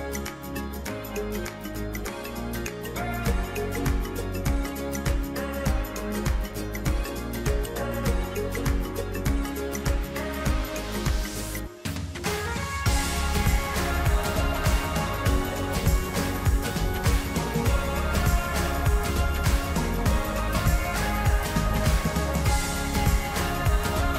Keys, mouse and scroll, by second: 3.1 e, 7.0-9.1 drag, 12.4-14.9 drag, 22.4 e.